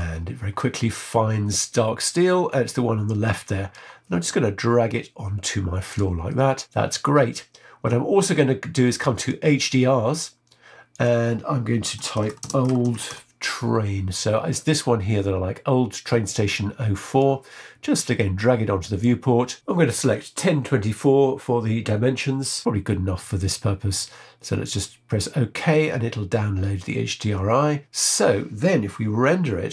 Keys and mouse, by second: 9.1 click, 10.9-14.1 drag.